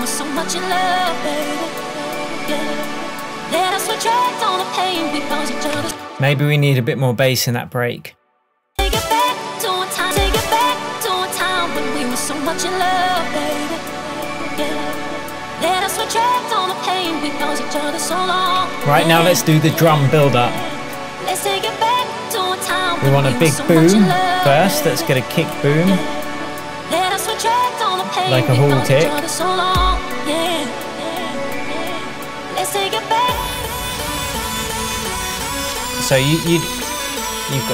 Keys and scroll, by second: 5.9 space, 23.8 super+t.